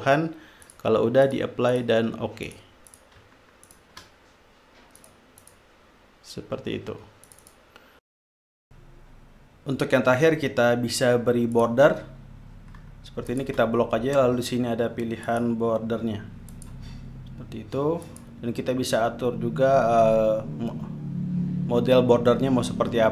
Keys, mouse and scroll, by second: 0.0 click, 1.0 click, 1.6 click, 2.1 click, 2.8 click, 3.3 click, 4.0 shift+click, 5.3 click, 5.8 click, 7.6-8.3 drag, 8.5 click, 11.6 click, 13.3 shift+click, 15.3 click, 16.5 click, 18.0 click.